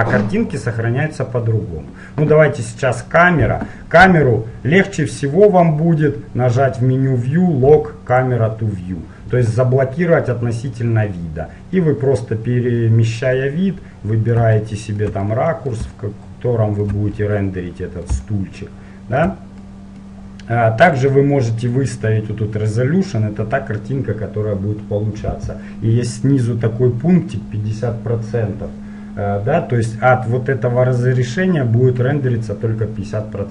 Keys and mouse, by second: 0.1 click, 1.4 click, 4.2 n, 8.3-10.2 drag, 10.6-12.5 middle drag, 14.8-21.1 middle drag, 21.1-23.1 drag.